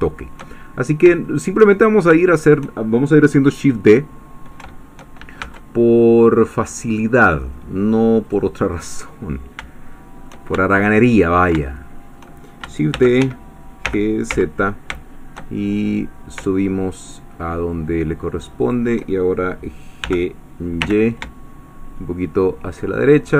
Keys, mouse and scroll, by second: 0.6-1.1 shift+scroll up 1, 1.2 shift+middle click, 1.8 shift+scroll down 1, 2.2 shift+middle click, 5.5 Caps_Lock, 8.2 click, 9.3-9.7 scroll up 1, 9.9 shift+middle click, 10.6-12.6 ctrl+shift+middle drag, 12.9 shift+d, 13.2 shift+Escape, 14.3 z, 18.6 shift+click, 20.0 g, 20.8 y, 22.7 shift+click.